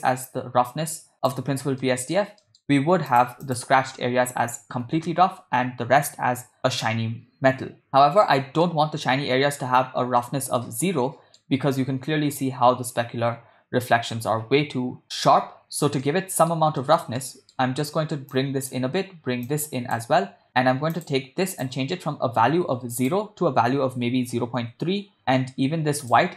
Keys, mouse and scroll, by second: 0.1-1.4 drag, 1.8 middle click, 2.4 middle click, 3.2 click, 7.9 middle click, 8.7-9.7 middle drag, 10.3 middle click, 10.9-11.5 middle drag, 13.1-15.1 middle drag, 16.1-16.5 middle drag, 16.8 middle click, 17.2 ctrl+middle click, 18.3-18.8 drag, 19.5 click, 20.9-21.3 drag, 21.6 click, 26.1 click.